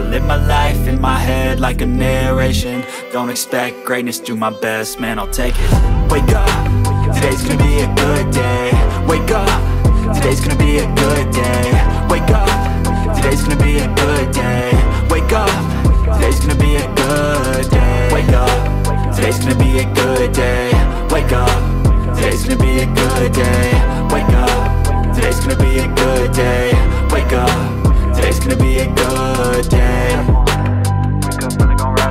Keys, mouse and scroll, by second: 2.6 right click, 8.3 space, 8.4 alt+click, 8.5 alt+double click, 8.9 double right click, 14.0 ctrl+space, 14.3 ctrl+click, 14.4 ctrl+space, 14.8 ctrl+click, 14.8 ctrl+space, 17.9 double click, 18.2 double click, 18.6 shift+click, 19.7 ctrl+alt+z, 29.6 alt+double click, 30.0 alt+click.